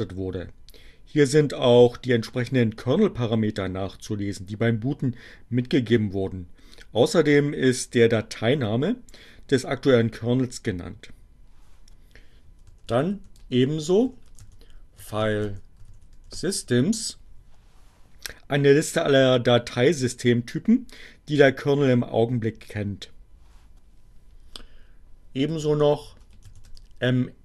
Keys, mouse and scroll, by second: 11.4-16.4 typing, 16.8 Return, 24.3-27.4 typing.